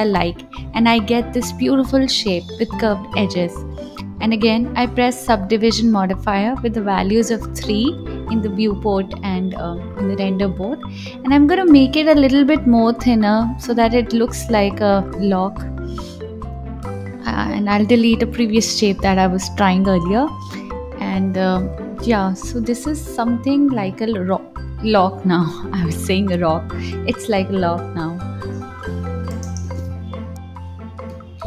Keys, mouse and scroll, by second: 1.6 ctrl+b, 2.8-7.7 drag, 10.3-11.8 drag, 11.8 right click, 12.6 scroll down 1, 12.7-14.4 middle drag, 14.4 KP_7, 15.2 click, 19.7 KP_1, 20.5 click, 21.4 x, 30.3 click.